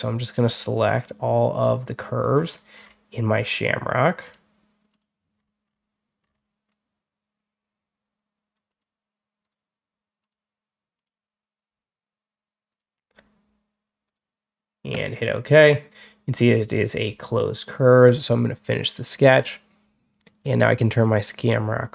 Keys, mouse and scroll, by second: 0.0 click, 1.4 click, 2.3 scroll up 2, 2.6 scroll down 2, 4.1 click, 4.8 click, 5.2 scroll down 1, 5.5 middle click, 6.1-6.5 middle drag, 8.5 click, 9.3 click, 10.1 click, 10.8 click, 12.6 click, 13.9 click, 14.8 click, 17.9 click, 20.2 click, 20.8 click.